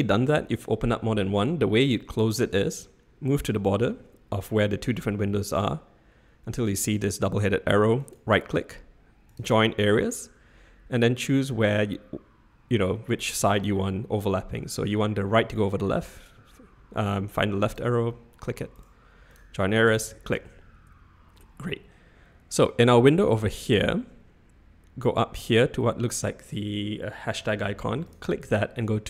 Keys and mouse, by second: 8.0-17.8 right drag, 18.9-19.9 right drag, 28.1-29.0 drag.